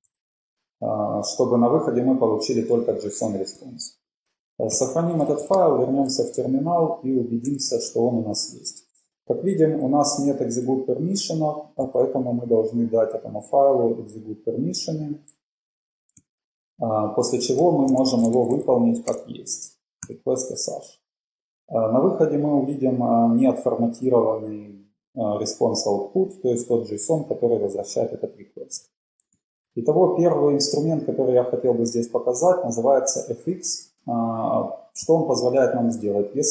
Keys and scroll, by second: 0.2 super+s, 3.5 ↻, 5.0 super+s, 5.0 ↻, 5.5 ctrl+`, 19.5 typing, 29.4 ctrl+l, 35.6 typing.